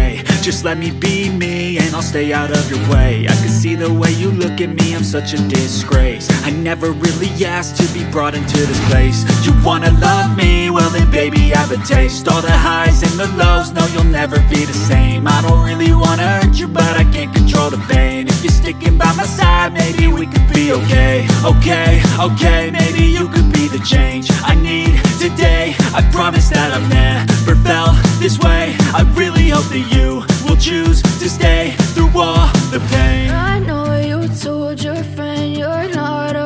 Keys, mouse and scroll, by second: 24.5 typing, 27.4-28.7 typing.